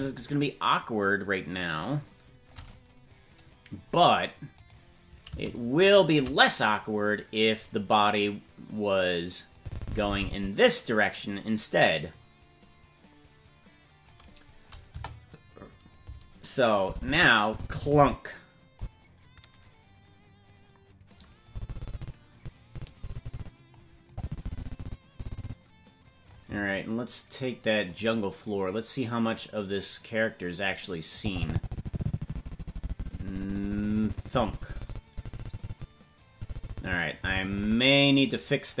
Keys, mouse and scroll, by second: 2.5 right click, 3.8-4.2 scroll down 1, 4.6 scroll down 2, 4.6 right click, 9.5-10.7 drag, 12.1-14.1 drag, 14.4-14.9 scroll down 2, 14.9 KP_0, 16.8-18.8 drag, 21.4-23.8 drag, 24.1-26.3 drag, 30.0 click, 31.2-37.9 drag.